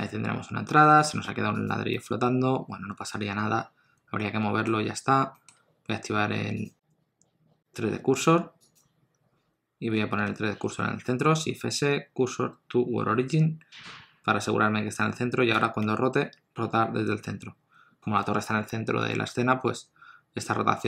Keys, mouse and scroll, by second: 1.5 click, 2.0 middle click, 5.3 middle click, 6.6 click, 10.3 shift+s, 15.5 r.